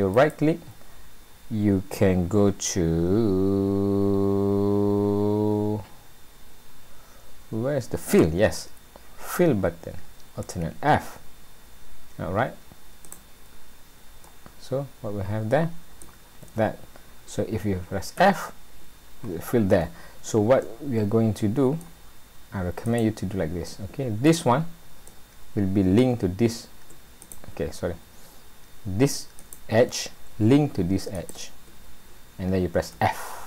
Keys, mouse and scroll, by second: 0.1 right click, 14.3 middle click, 16.5 ctrl+z, 18.2 f, 19.7 ctrl+z, 20.6 middle click, 22.9 click, 23.6 middle click, 25.1 middle click, 27.2 click, 27.9-28.4 scroll up 2, 29.4 click, 31.1 shift+click, 32.9 f.